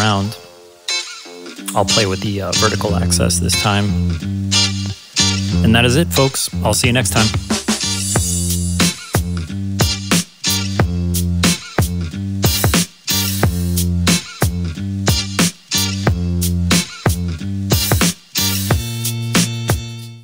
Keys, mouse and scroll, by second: 0.2 click, 3.7-5.0 drag.